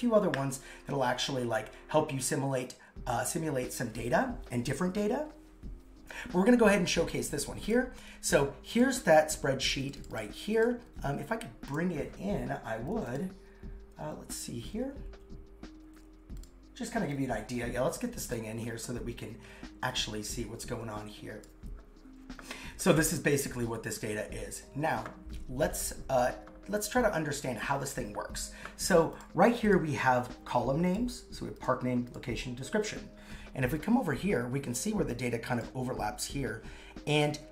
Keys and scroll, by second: 10.7 super+Tab.